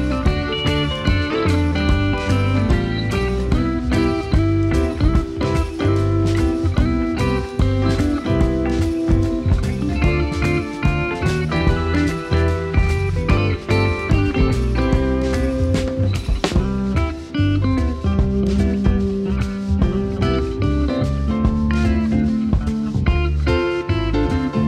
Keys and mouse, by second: 0.8 click, 1.3 alt+middle click, 3.1 alt+middle click, 3.6 Tab, 4.6 click, 5.0 click, 5.6 3, 6.5 i, 7.7 i, 8.3 click, 8.9 Tab, 9.6 click, 10.2 middle click, 11.5 ctrl+s, 11.6 click, 12.2 alt+middle click, 13.5 middle click, 14.8 alt+middle click, 16.9 click, 18.0 shift+a, 20.0 click, 20.3 shift+click, 20.8 g, 20.9 z, 22.2 KP_1, 23.1 g, 23.2 z.